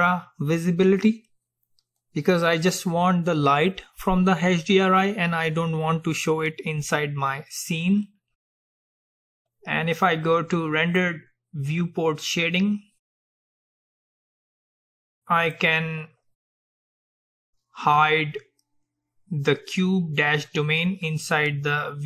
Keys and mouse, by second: 11.0-12.9 drag, 15.0-17.0 drag.